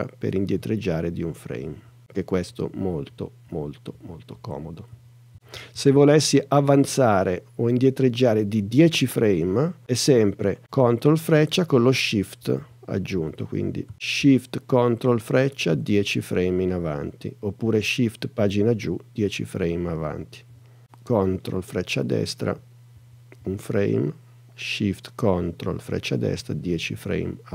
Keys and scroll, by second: 1.7 super+Right, 4.9 super+Left, 6.7 super+Right, 11.3 super+Right, 12.6 super+Left, 13.2 Left, 13.9 super+Left, 15.7 shift+super+Right, 22.4 super+Right, 23.5 super+Right, 26.3 shift+super+Right.